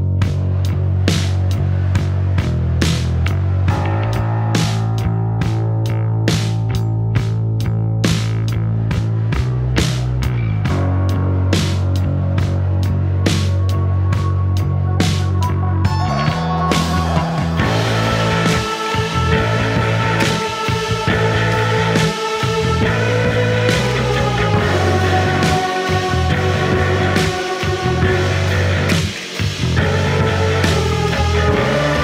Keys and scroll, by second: 12.2 p, 14.7 4, 16.9 F1, 22.4 F1, 28.1 Delete, 30.0 ctrl+z.